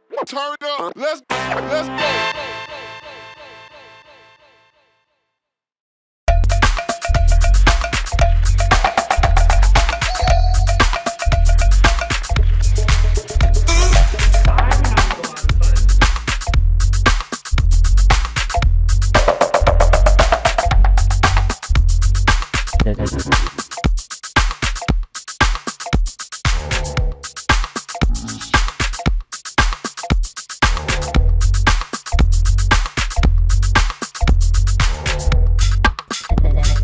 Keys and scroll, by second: 3.6-5.6 typing, 6.0 Return, 7.3 p, 8.8 shift+s, 11.5 shift+Escape, 13.5 shift+space, 16.6 p, 20.2 shift+space, 21.7 shift+s, 23.3 ctrl+space, 24.6 g, 27.2 shift+x, 33.7 shift+x.